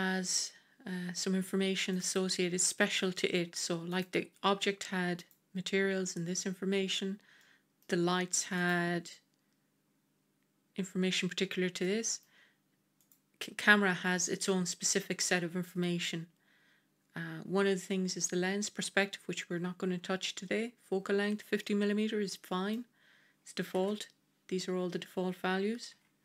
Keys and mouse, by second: 1.8 click, 2.5-2.9 middle drag, 3.8 click, 7.3-7.7 middle drag, 11.7-12.1 middle drag, 12.9 click, 21.5-22.6 middle drag, 23.7 KP_0, 25.8 g.